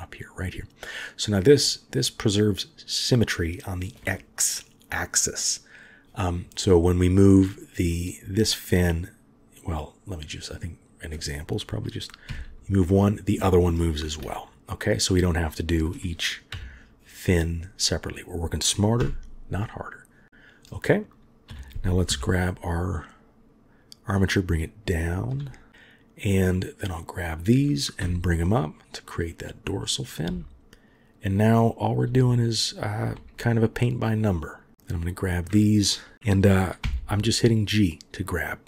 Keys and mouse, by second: 7.4 middle click, 10.6 click, 12.3 g, 16.5 KP_3, 19.0 a, 21.5 g, 26.4 click, 28.0 g, 29.8 click, 30.2 g, 31.8 click, 32.1 g, 32.9 click, 33.2 g, 34.6 click, 34.7 g, 34.9 click, 36.8 g.